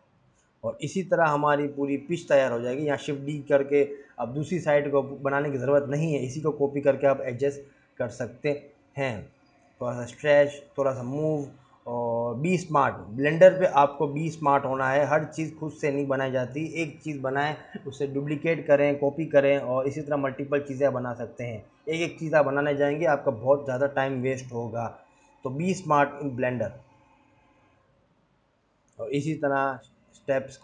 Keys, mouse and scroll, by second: 0.6 r, 1.4 right click, 2.1 r, 3.2 scroll up 2, 3.5 g, 5.0 g, 6.4 scroll up 3, 6.9 scroll down 1, 7.0 scroll up 1, 7.5 Tab, 7.9 scroll down 1, 8.0 Tab, 8.1 s, 9.8 Tab, 9.9 Tab, 10.1 Tab, 10.5 click, 10.9 s, 13.4 s, 14.5 g, 16.0 shift+d, 16.9-17.8 scroll down 9, 17.2 click, 18.1-18.7 scroll up 5, 18.7 click, 18.8 click, 18.9-19.8 scroll down 3, 19.8 click, 20.2 click, 20.9-21.2 scroll up 4, 21.4 Tab, 21.6 scroll down 3, 22.6 shift+d, 25.6-26.2 scroll up 5, 26.4 Tab, 26.5 3, 26.6 click, 27.1 scroll up 1, 27.8 shift+click, 28.4 click, 28.7 g, 29.8 3.